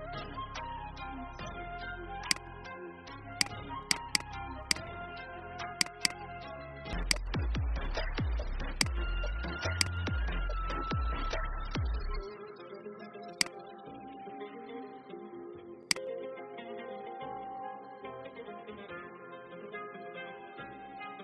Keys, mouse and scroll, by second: 0.4 ctrl+z, 2.1 click, 4.8 Delete, 5.7 click, 6.9 click, 7.6-8.0 alt+scroll down 1, 8.6-12.0 drag, 13.2 shift+click, 15.8 shift+click, 16.1 shift+click, 17.9 alt+scroll up 1, 19.2-21.1 alt+scroll down 1, 21.1 Up.